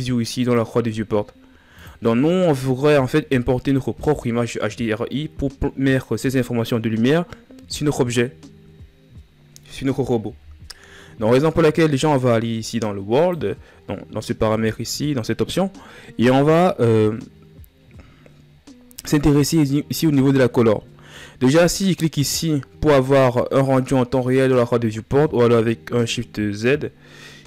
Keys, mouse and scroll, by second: 16.2-16.9 scroll up 4, 27.3 click.